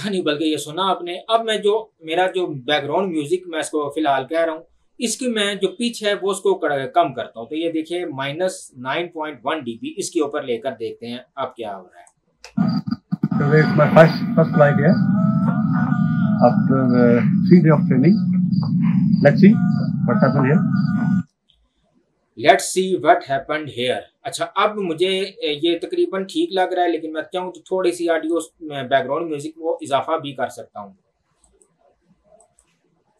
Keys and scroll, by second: 12.4 space, 21.1 space.